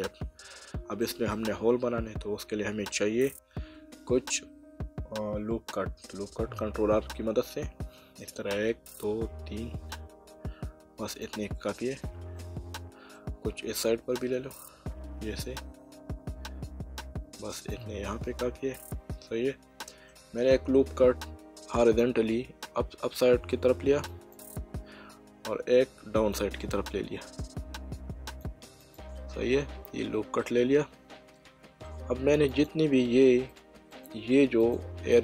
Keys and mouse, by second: 1.3 middle click, 6.9 ctrl+r, 11.1 click, 11.9 right click, 12.4 middle click, 14.2 ctrl+r, 17.5 click, 18.2 right click, 18.8 middle click, 20.8 ctrl+r, 22.0 click, 24.3 click, 25.8 ctrl+r, 26.3 click, 28.8 click, 32.5 click.